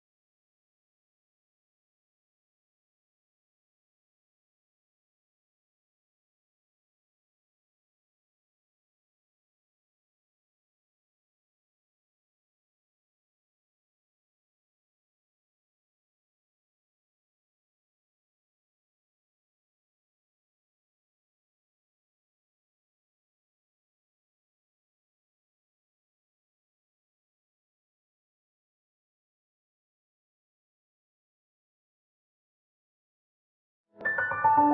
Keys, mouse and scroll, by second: 1.4 click, 3.1 click, 5.9 click, 7.7 scroll up 1, 8.3-8.6 scroll down 1, 9.8-14.8 drag, 19.9 click, 20.3 scroll down 1, 20.6 scroll up 1, 21.9 click, 23.3-25.4 typing, 26.4 click, 28.3 click, 31.8-32.2 scroll up 1, 34.3 click.